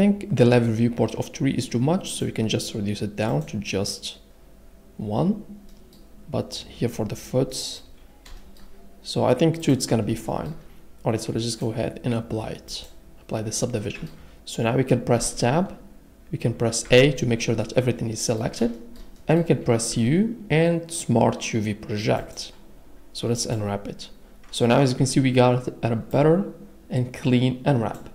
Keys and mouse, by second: 2.2 click, 3.3 click, 11.7-12.9 drag, 13.8 middle click, 15.2 Tab, 16.8 a, 20.0 u, 26.2 drag, 26.2 a.